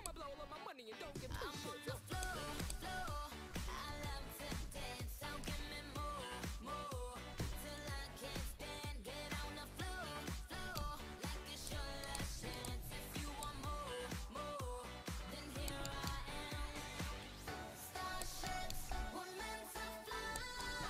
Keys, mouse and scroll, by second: 3.6-5.4 middle drag, 5.4-7.4 drag, 5.4-7.4 right drag, 7.7-10.8 drag, 10.4 right click, 12.1-14.0 right drag, 15.0 r, 15.5 click, 15.9-16.9 middle drag, 16.5 r, 18.9 r, 20.6-20.8 drag.